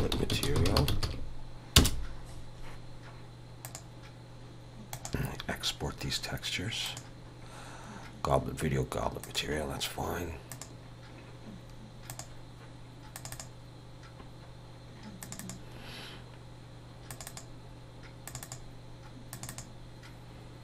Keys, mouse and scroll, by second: 3.6 ctrl+shift+e.